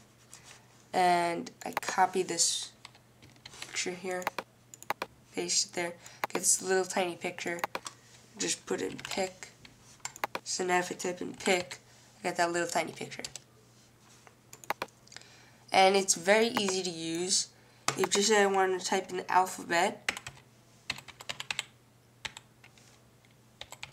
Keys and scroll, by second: 9.1-12.5 typing, 20.2-23.9 typing.